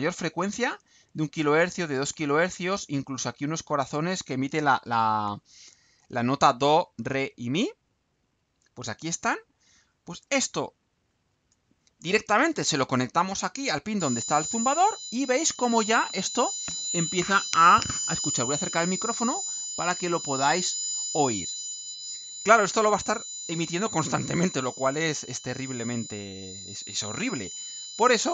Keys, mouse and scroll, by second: 8.3 click, 9.4 click, 11.1 ctrl+u.